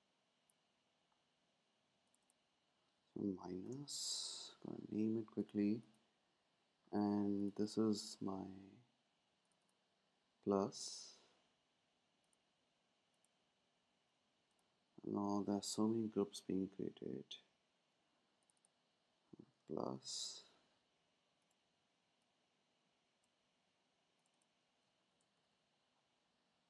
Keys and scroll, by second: 3.4-4.7 typing, 15.3 shift+super+g, 19.8-20.7 typing, 24.9-26.0 typing.